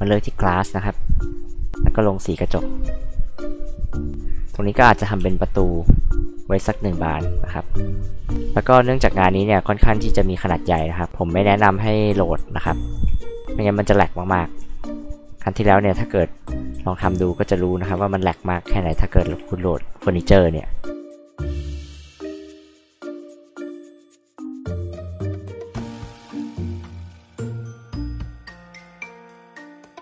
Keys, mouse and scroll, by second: 1.7 click, 5.2 r, 6.9 click, 8.8 click, 9.9 click, 10.8 f, 11.1 click, 13.0 b, 13.4 click, 14.6 r, 15.8 click, 17.0 click, 17.9 p, 18.2-19.2 drag, 19.3 b, 20.8 click, 22.4 p, 22.6 click, 23.4 ctrl+z, 23.8 click, 24.5-24.8 scroll up 4, 24.9 click, 25.3 click, 25.8 click, 26.1 click, 26.5 p, 26.7 click, 28.0 click, 28.0 h, 28.4 r, 28.6 click, 29.7 click.